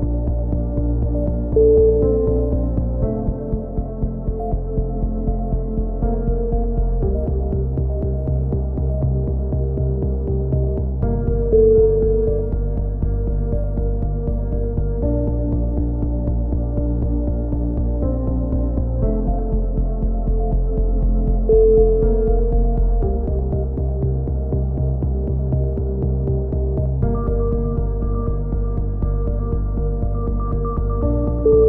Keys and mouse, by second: 0.1 click, 0.9 right click, 1.7 f, 1.7 a, 1.9 click, 3.2 click, 5.4-7.2 drag, 7.1 right click, 7.2 z, 7.7 f, 7.9 a, 8.2 right click, 9.0 f, 9.1 a, 9.4-10.7 right drag, 10.6 f, 10.7 a, 10.9 click, 10.9 z, 14.5-16.4 middle drag, 16.4 click, 16.4 KP_1, 16.5 z, 20.1 z, 20.2 z, 21.1 z, 21.5 k, 23.0 a, 25.6-30.2 drag, 30.2 right click, 30.7 KP_3, 31.0 click.